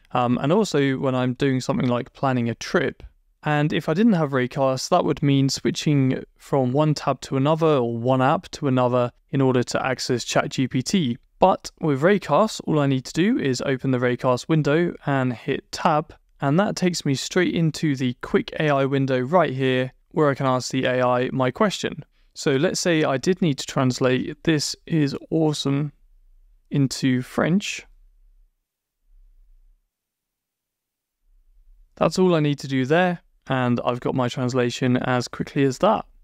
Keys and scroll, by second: 15.5 Tab, 22.0 super+BackSpace, 28.5 shift+BackSpace, 30.9 shift+BackSpace, 31.4 Return.